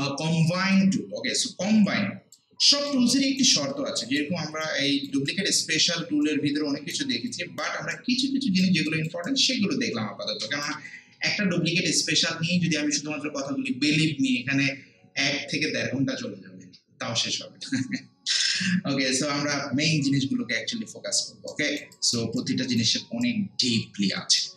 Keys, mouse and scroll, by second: 1.3 scroll down 1, 2.3 alt+click, 3.1 alt+right click, 3.7 alt+middle click, 4.5 alt+right click, 4.9 alt+click, 5.3 alt+right click, 5.8 middle click, 6.2 alt+right click, 7.3 alt+click, 7.9 alt+right click, 8.9 alt+click, 9.3-15.0 alt+right drag, 21.5 alt+right click, 21.9 alt+click, 22.4-24.5 alt+right drag.